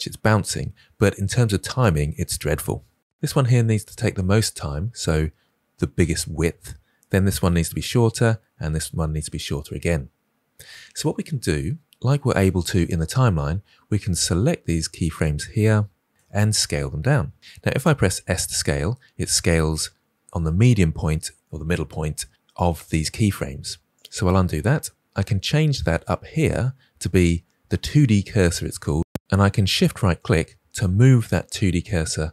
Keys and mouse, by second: 14.6 click, 14.8-16.1 drag, 18.2 s, 26.4-28.9 drag, 29.7 shift+click.